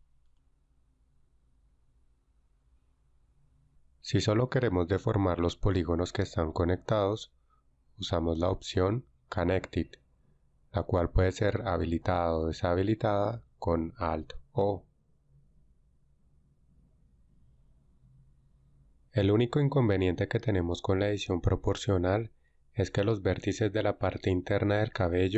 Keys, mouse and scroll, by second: 3.7-5.2 right drag, 14.5 alt+c, 16.7 alt+c, 19.1 alt+c.